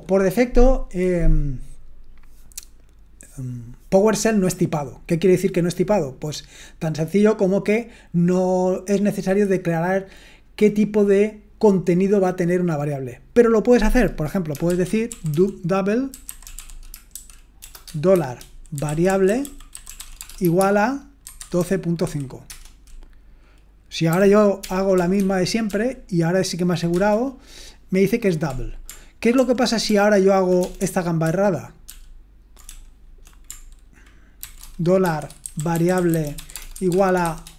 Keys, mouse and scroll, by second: 14.8-22.5 typing, 24.1 typing, 25.2 ctrl+p, 25.7 ctrl+p, 26.9 Return, 29.3 ctrl+p, 29.9 ctrl+p, 30.6 BackSpace, 30.8 BackSpace, 31.9 ctrl+p, 32.7 BackSpace, 34.4 ctrl+c, 34.8-37.5 typing.